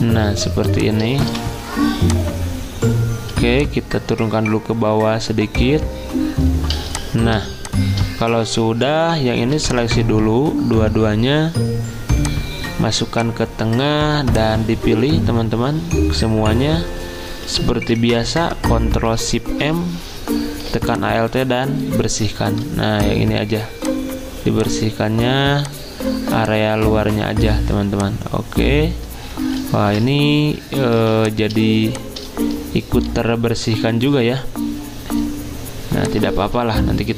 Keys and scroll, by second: 1.3 v, 5.2 v, 6.8 z, 9.6 v, 18.7 m, 29.7 ctrl+z, 31.0 z.